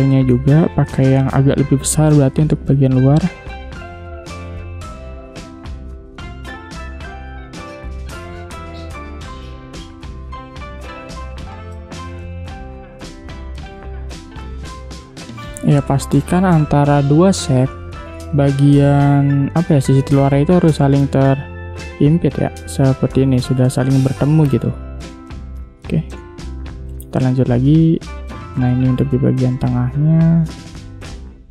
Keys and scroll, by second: 0.2 space, 10.0 v, 26.1 space.